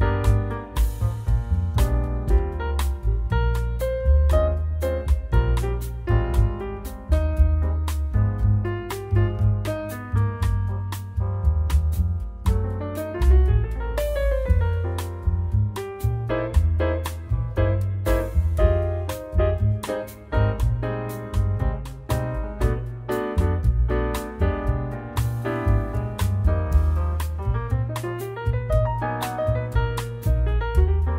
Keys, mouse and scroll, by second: 0.6-1.1 scroll down 2, 1.5 shift+middle click, 3.7 scroll up 1, 4.9-5.4 scroll down 1, 5.7 middle click, 9.5-10.2 scroll up 4, 10.9 scroll up 2, 13.0-13.4 scroll up 2, 14.7 shift+middle click.